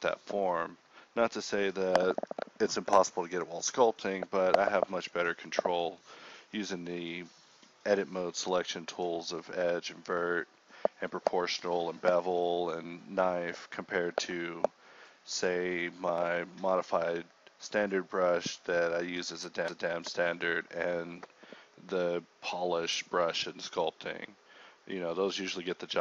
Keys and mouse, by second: 0.8 g, 1.6 middle click, 1.9 a, 2.2 k, 3.0 a, 3.8 Tab, 4.2 Tab, 4.2 KP_1, 4.7 ctrl+r, 5.2-5.8 typing, 7.1 g, 7.6 z, 8.7-10.9 typing, 12.0 g, 12.0 z, 13.8 g, 15.3 g, 16.1 Tab, 17.0 Tab, 17.0 KP_1, 17.4 KP_3, 17.4 z, 17.6 a, 17.8 ctrl+click, 18.6 o, 19.0 s, 19.9 click, 20.8-23.4 typing, 23.6 ctrl+click, 24.4-25.9 typing.